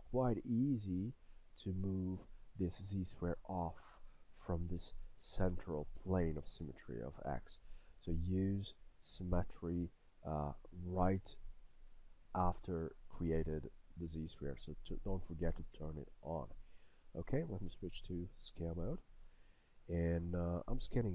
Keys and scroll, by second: 17.8 e.